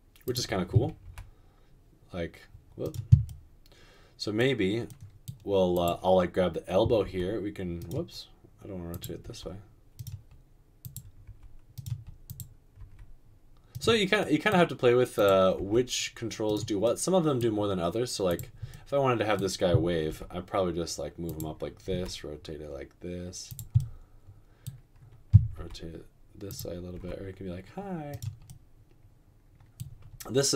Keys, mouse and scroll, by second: 1.1 r, 7.2 r, 9.2 typing, 11.2 typing, 12.8 typing, 15.6 typing, 20.1 g, 21.9 typing, 25.5-26.9 typing.